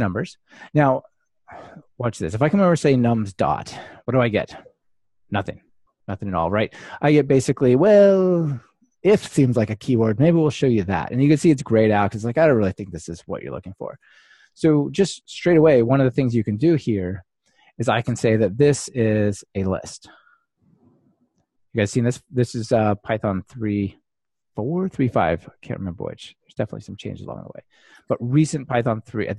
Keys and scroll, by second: 23.9 ctrl+alt+shift+Left.